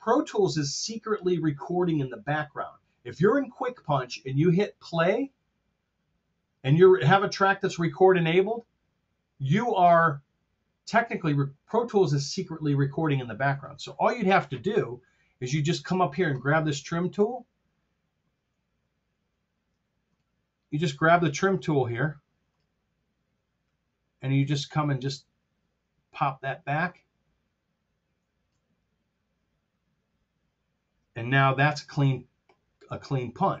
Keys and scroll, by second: 19.7 F7, 21.0 F7, 21.3 F5.